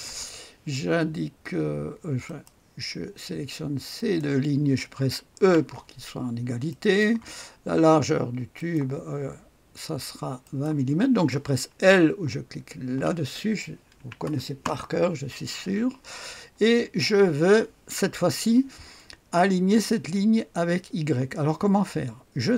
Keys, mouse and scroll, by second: 2.2 click, 3.0-3.7 typing, 4.0 click, 5.4 typing, 6.2-6.7 scroll down 1, 6.7 middle click, 8.6 click, 10.4 click, 11.3-12.9 typing, 14.0-15.9 typing, 15.4-16.5 scroll down 1, 16.8-19.4 scroll up 1.